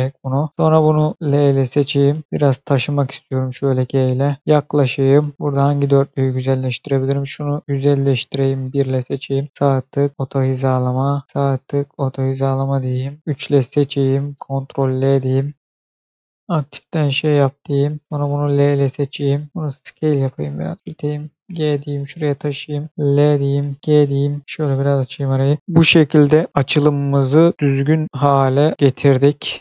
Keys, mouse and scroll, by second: 0.5 click, 1.2 l, 2.2-2.8 scroll down 1, 2.8 g, 3.5 click, 4.3 middle click, 4.4-5.1 scroll up 1, 5.3 shift+middle click, 6.8 click, 8.4 1, 9.2 click, 9.5 right click, 10.1 click, 11.2 shift+right click, 11.7 click, 13.2 3, 13.7 click, 14.7 ctrl+l, 15.3 right click, 16.0 click, 16.4 scroll down 1, 17.2 scroll down 1, 17.6-18.0 scroll up 1, 18.0 click, 18.5 l, 20.0 s, 20.6 click, 21.9 click, 23.1 l, 23.8 g, 24.4 click, 25.2 scroll down 1, 25.6 shift+middle click, 26.5-27.0 scroll down 1, 27.0 shift+middle click, 28.0-28.7 scroll up 1, 28.7 scroll down 1.